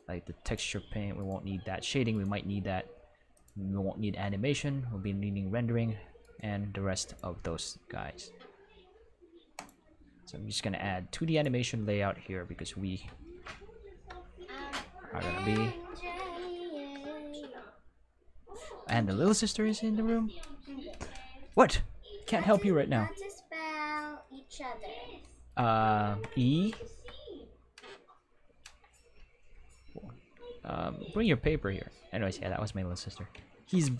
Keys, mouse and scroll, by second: 0.4 click, 1.1 right click, 2.1 right click, 3.3 click, 6.2 right click, 7.0 click, 9.5 click, 11.3 click, 13.8 Home, 15.3 Home, 21.8-23.1 ctrl+middle drag, 24.4-25.4 ctrl+middle drag, 25.9 shift+middle click, 26.5 ctrl+middle click, 26.8 shift+middle click, 29.1-29.6 scroll down 1, 31.0 click, 33.5 ctrl+Tab.